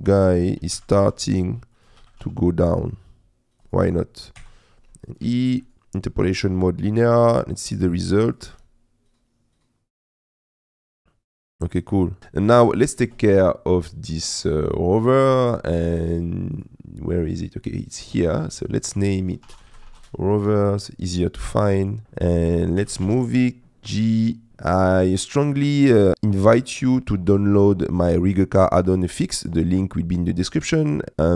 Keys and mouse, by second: 0.0 middle click, 0.1 click, 1.0 g, 1.0 shift+z, 2.0 g, 2.2 z, 3.6 click, 4.4 i, 5.3 a, 5.7-7.4 drag, 7.8 click, 8.6 space, 12.2 middle click, 14.0 click, 14.6 click, 16.6 click, 17.1 click, 18.4 F2, 18.4 3, 21.9 click, 22.8 g, 23.1 shift+z, 24.5 middle click.